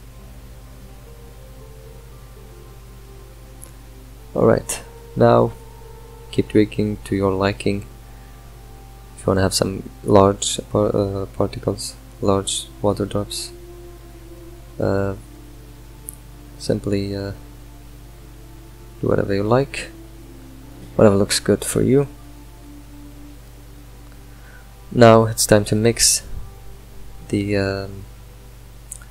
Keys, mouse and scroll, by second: 4.0 click, 6.2-11.4 middle drag, 11.4-15.1 drag, 15.1-22.8 middle drag, 22.8 click.